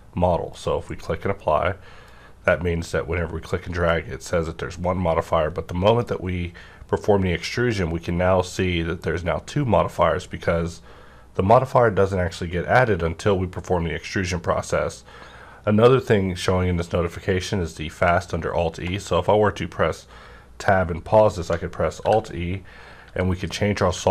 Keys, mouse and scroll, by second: 2.1-8.3 drag, 18.7 Tab, 18.7-21.1 drag, 18.7 -, 21.5 click, 21.5 -, 22.0 alt+e, 23.0 alt+e.